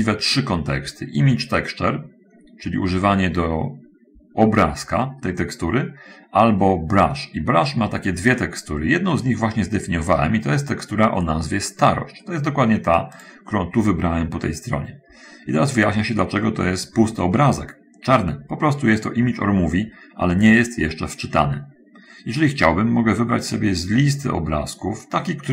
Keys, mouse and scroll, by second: 13.5 click, 23.7 click.